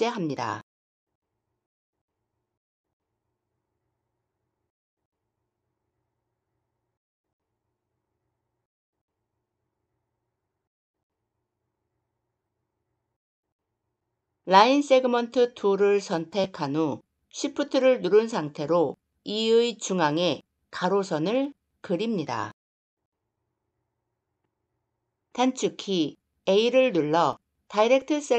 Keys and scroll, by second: 25.3 a.